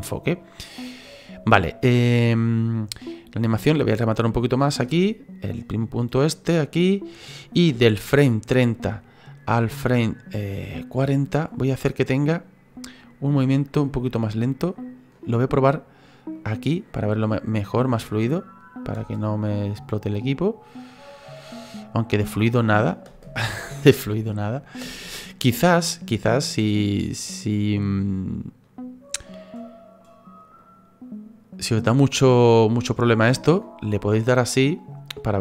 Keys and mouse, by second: 2.9 click, 4.8 space, 7.7 space, 8.1 click, 14.2 ctrl+middle click, 16.3 click, 17.4 click, 18.9 space, 23.1 space, 24.1 space, 24.8 space, 28.0 click, 30.6 click, 31.5 click, 32.3 click, 34.8 click.